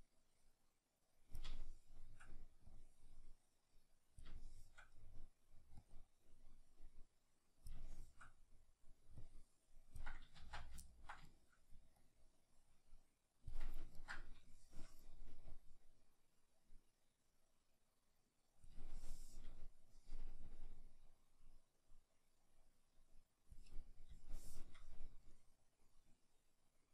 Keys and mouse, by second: 1.5-2.7 shift+middle drag, 2.7-4.4 drag, 4.4-5.8 shift+middle drag, 5.8-7.9 drag, 7.9-9.2 shift+middle drag, 9.2-10.9 drag, 10.4 ctrl+z, 10.9-12.0 ctrl+middle drag, 12.0-14.0 drag, 14.0-15.5 ctrl+middle drag, 15.5-19.0 drag, 19.0-20.4 shift+middle drag, 20.4-23.8 drag, 23.8-25.2 middle drag, 25.2-26.9 drag.